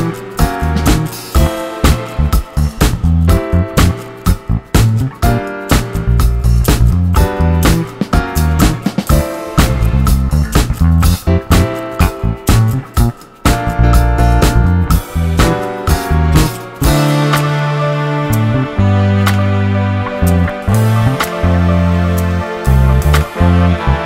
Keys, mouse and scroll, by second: 0.5 scroll down 2, 1.5 shift+a, 4.3 KP_0, 5.2-5.7 scroll down 1, 5.7 g, 6.8-7.3 middle drag, 7.3 shift+d, 8.2-10.0 middle drag, 10.0 g, 10.7-11.7 middle drag, 11.7 KP_0, 12.3-13.0 scroll down 1, 13.0 z, 13.4 scroll up 6, 15.8 scroll down 3, 17.2 click, 17.4 g, 18.9-19.6 middle drag, 19.6 g, 20.2 scroll down 3, 20.5-21.1 middle drag, 21.1 click, 21.3-21.7 middle drag, 21.7 g, 23.1 KP_0.